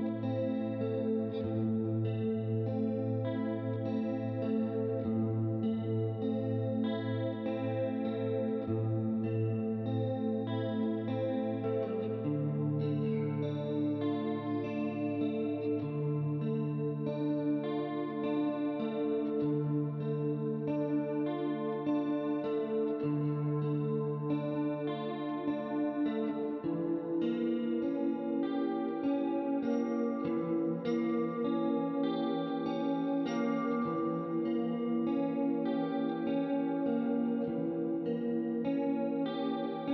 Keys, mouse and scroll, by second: 1.0 click, 3.6 middle click, 5.2 ctrl+z, 6.4 click, 9.1 right click, 12.3 click, 13.3 click, 14.1 shift+click, 15.0 click, 18.4 shift+click, 20.1 click, 21.3 click, 22.0 ctrl+z, 22.7 click, 23.4 ctrl+z, 23.8 shift+click, 25.1 click, 30.7 click, 31.5 shift+click, 32.2 click, 33.8 click, 34.9 click, 36.1 right click, 37.3 middle click, 38.2 middle click, 38.5 click, 39.8 ctrl+d.